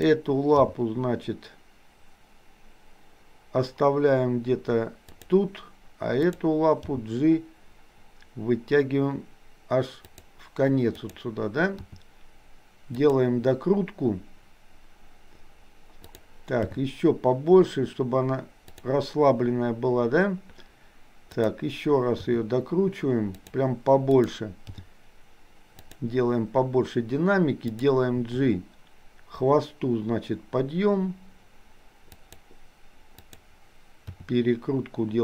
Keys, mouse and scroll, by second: 0.5 g, 6.3 click, 6.9 g, 11.0 click, 11.8 r, 16.7 g, 21.4 click, 22.3 r, 24.0 click, 24.8 g, 27.8 click, 28.2 g, 33.3 click, 34.2 r.